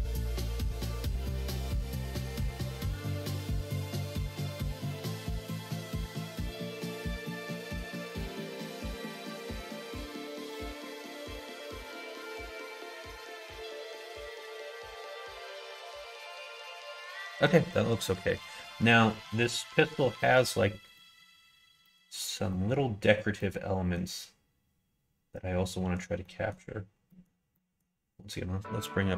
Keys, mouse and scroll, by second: 0.6 ctrl+r, 2.9 middle click, 3.8 shift+middle click, 4.3 2, 6.0 middle click, 6.9 ctrl+z, 8.7 3, 9.6 click, 10.8 g, 13.1 middle click, 13.3 alt+z, 13.9 click, 14.2-17.4 middle drag, 17.8 middle click.